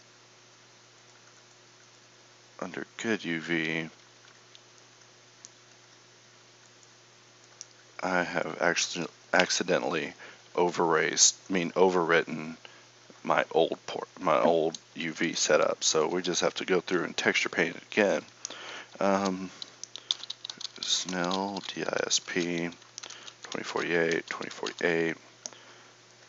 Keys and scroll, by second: 4.6 Tab.